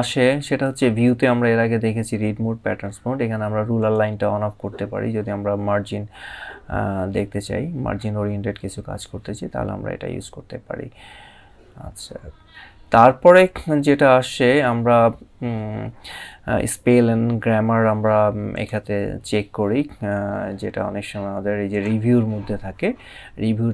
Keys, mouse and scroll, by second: 3.4 click, 18.2 click, 21.4 click.